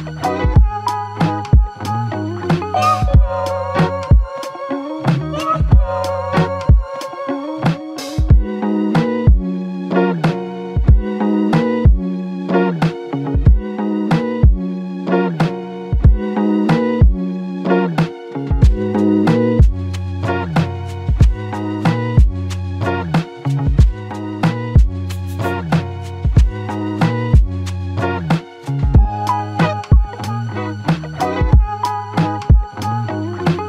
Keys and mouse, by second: 1.2 double click, 32.7 alt+m.